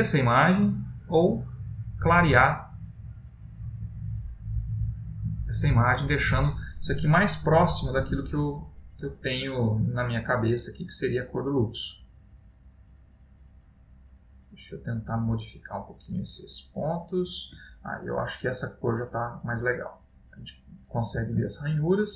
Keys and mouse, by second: 0.6 click, 2.1 click, 5.1 click, 8.0 click, 11.0 click, 13.8 click, 16.7 click, 18.0 middle click, 21.6 ctrl+middle click.